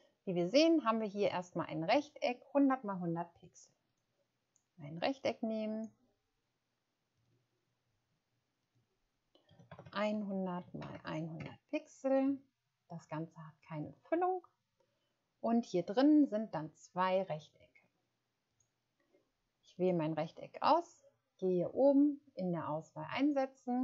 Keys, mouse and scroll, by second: 9.5-10.9 typing, 11.3 Return.